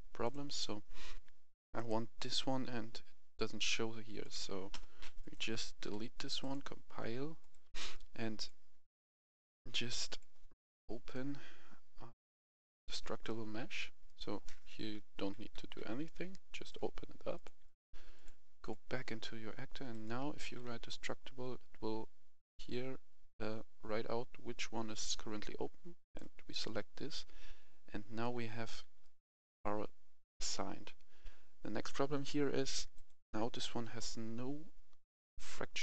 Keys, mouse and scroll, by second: 3.6 right click, 3.8 s, 5.0 click, 5.6 Delete, 6.3-8.2 drag, 13.9-17.2 right drag, 14.8 s, 15.1 d, 15.4 w, 15.9 w, 17.2 click, 20.0 d, 20.3 e, 20.5 s, 25.9 click, 27.4-28.1 scroll up 1, 28.1-30.3 right drag, 32.8 click.